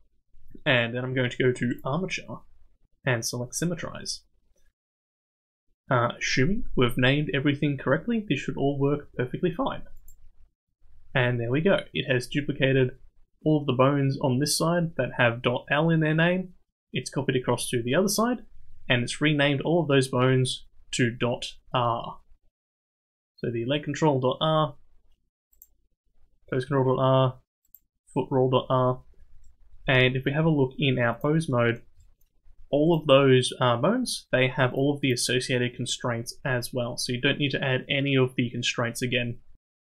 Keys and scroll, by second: 30.2 ctrl+Tab.